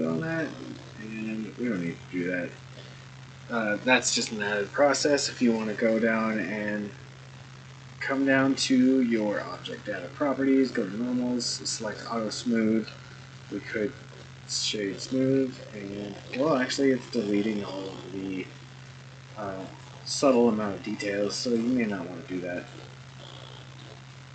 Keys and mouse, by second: 0.3-0.8 middle drag, 1.7-2.7 right drag, 9.5 click, 10.7 click, 11.9 click, 13.3-14.7 right drag, 15.9-16.3 shift+middle drag, 16.5-17.9 middle drag, 21.4 click, 22.6 click, 23.1-23.8 middle drag.